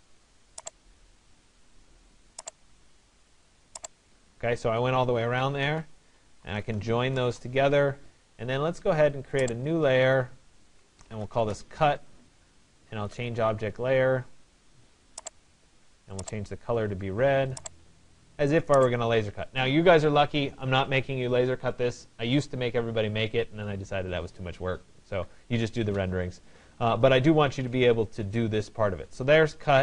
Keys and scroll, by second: 5.2 Return, 25.6 Escape.